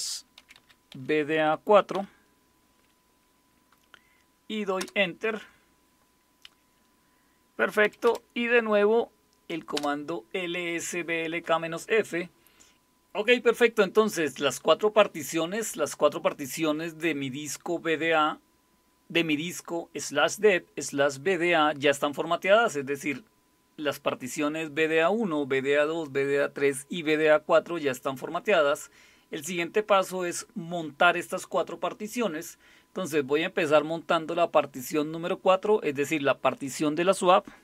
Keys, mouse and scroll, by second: 0.4-1.9 typing, 4.8 Return, 7.8 Up, 8.1 Up, 9.8 Return.